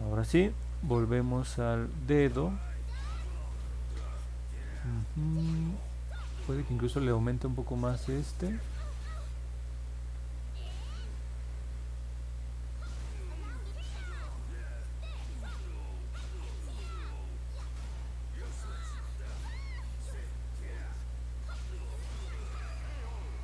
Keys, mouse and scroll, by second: 7.7 click, 10.7 click, 11.6 click, 12.2 click, 12.6 click, 13.1 click, 13.5 click, 16.3 click, 17.8 click, 18.1 click, 18.5 click, 19.2 click, 19.9 click, 20.3 click, 20.7 click, 21.7 click, 22.1 click, 22.5 click, 22.9 click, 23.2 click.